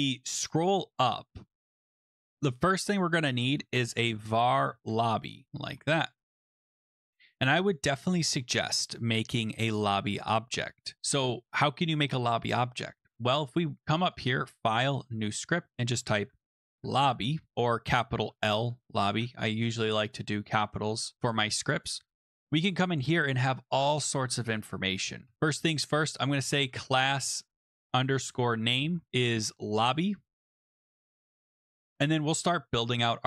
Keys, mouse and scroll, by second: 0.5 scroll down 1, 1.1-2.4 scroll down 4, 2.9 click, 3.6-6.4 typing, 4.5 scroll, 7.7 click, 9.6 click, 9.6 {, 11.0 Return, 13.3 middle click, 14.2 right click, 14.2 click, 14.9 click, 16.2-17.6 typing, 17.6 Left, 17.7 Left, 17.9 Left, 18.0 Left, 18.2 Left, 18.6 Delete, 18.8-19.6 typing, 21.1 Return, 22.1 click, 23.6 click, 25.2-30.8 typing, 27.6 shift+click, 31.9 click, 33.0 click.